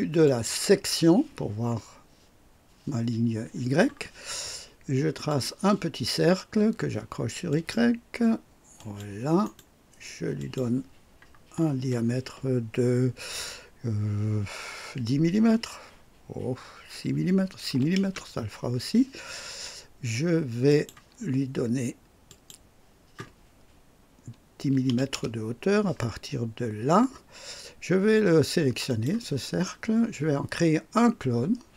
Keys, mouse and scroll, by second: 0.2 click, 5.2 click, 7.4 click, 8.7 click, 9.4 right click, 10.3 click, 11.7 r, 17.6 KP_6, 18.0 Return, 20.6 click, 22.2 click, 24.5 KP_1, 24.9 KP_0, 25.1 KP_Enter, 28.8 click.